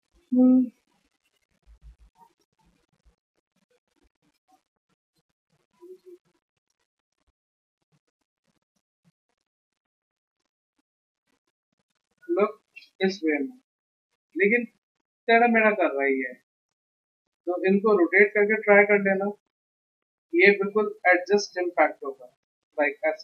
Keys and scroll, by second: 10.6 ctrl+alt+c, 15.3 a, 16.1 ctrl+z, 16.4 v, 20.1 ctrl+alt+c.